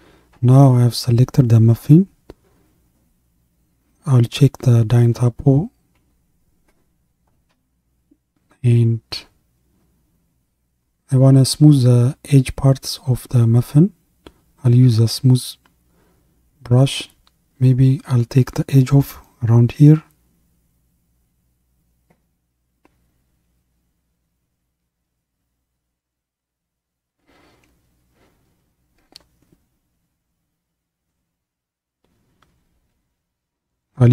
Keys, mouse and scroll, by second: 6.7-8.9 middle drag, 8.9 KP_1, 11.3-11.7 scroll up 3, 14.8-21.2 drag, 24.9 f, 27.3-30.4 drag, 33.8-34.1 drag.